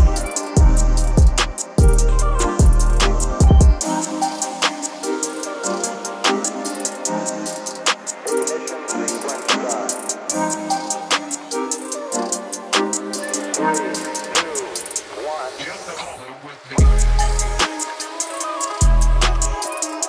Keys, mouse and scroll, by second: 1.1-4.2 typing, 1.5 click, 6.1-9.6 drag, 6.1 typing, 10.1-11.1 typing, 12.7-20.0 drag.